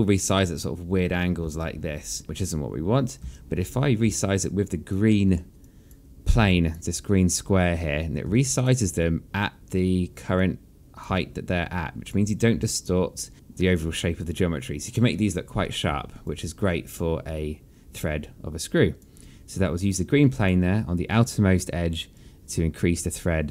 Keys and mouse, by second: 2.2 click, 3.1 ctrl+click, 3.9 ctrl+z, 4.9 alt+click, 5.8 alt+middle click, 6.3 alt+click, 7.2 alt+click, 9.1 alt+click, 11.8 alt+click, 13.3 alt+click, 16.9 alt+click, 20.5 alt+click, 22.8 click.